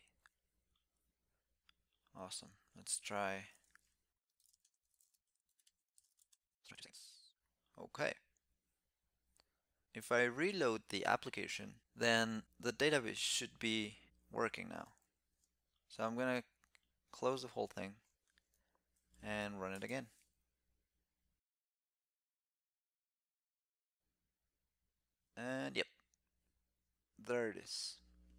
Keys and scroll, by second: 18.9 shift+super+t, 22.7 alt+super+i.